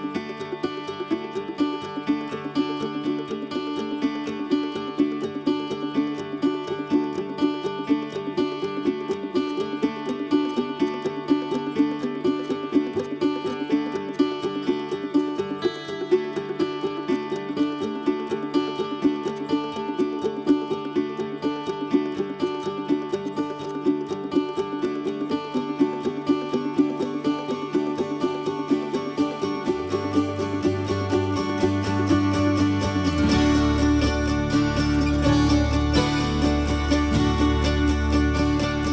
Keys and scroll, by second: 1.2 Escape, 17.9-18.8 typing.